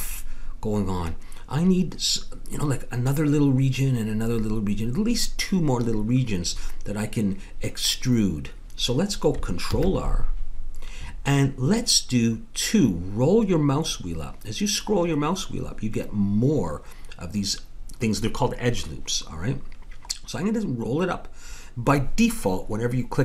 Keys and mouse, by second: 9.7 ctrl+r.